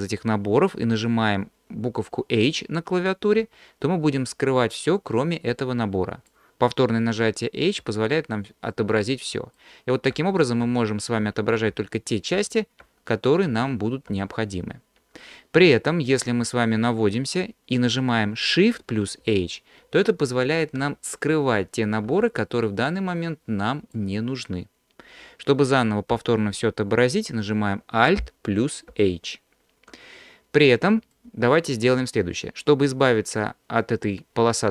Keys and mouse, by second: 3.4 h, 4.3-6.3 middle drag, 7.9 h, 8.7 middle click, 10.2-14.1 typing, 15.2 click, 19.3 shift+h, 20.8 shift+h, 21.6 shift+h, 22.1 shift+h, 22.9-23.9 drag, 28.9 alt+h, 31.1 click.